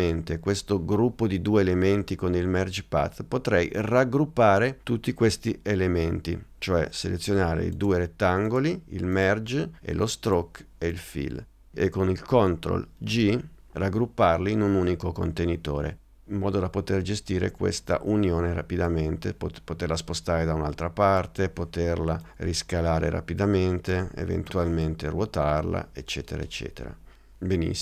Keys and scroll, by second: 13.2 super+g.